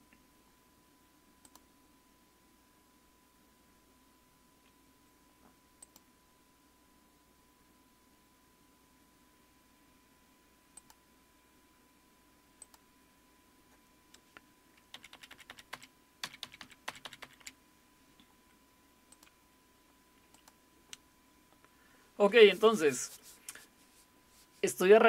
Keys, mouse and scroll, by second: 1.4 click, 5.8 click, 10.7-14.9 drag, 14.9 Up, 15.1 Up, 15.3 Up, 15.5 Up, 16.2 Down, 16.4 Down, 16.6 Down, 16.9 Up, 17.0 Up, 17.2 Up, 17.4 Up, 17.6 typing, 19.1-23.0 drag.